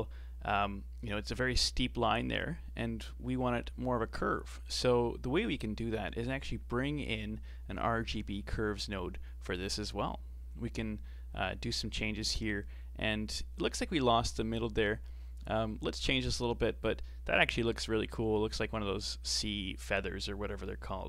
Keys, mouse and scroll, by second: 3.4 middle click, 4.2 scroll down 5, 4.5 middle click, 5.1-5.6 scroll up 4, 5.6 shift+a, 8.1 Down, 9.8 scroll up 4, 10.1-11.1 middle drag, 11.1-13.0 drag, 13.0-14.0 middle drag, 14.0 scroll up 3, 14.4-15.3 middle drag, 15.3-15.9 scroll down 3, 15.9-17.0 scroll down 1, 17.0-21.0 drag.